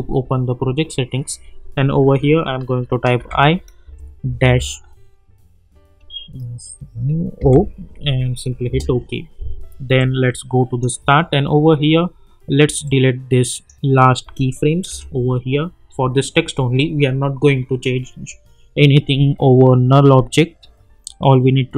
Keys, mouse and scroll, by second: 2.2 ctrl+k, 3.2 shift+i, 3.8 space, 4.4 space, 7.4 o, 8.7 Return, 10.0-10.9 drag.